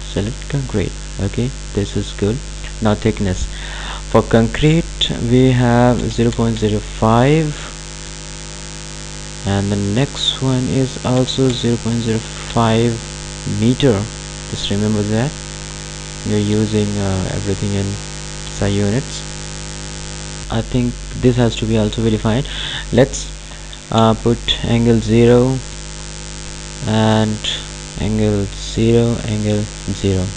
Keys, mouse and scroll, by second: 2.8 click, 8.4 Tab, 10.0 click, 14.7 click, 20.3 click, 25.7 Tab, 27.6 click.